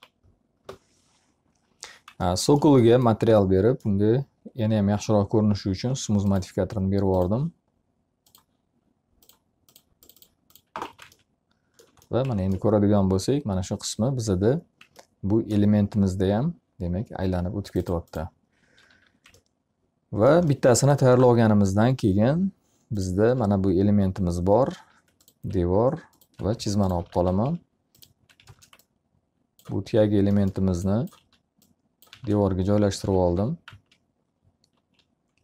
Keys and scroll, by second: 0.5 Return, 10.3 z, 10.9 alt+a, 18.4 q, 26.1-28.3 typing, 29.6 z, 31.1 s, 32.1 space, 32.9 l, 33.6 z.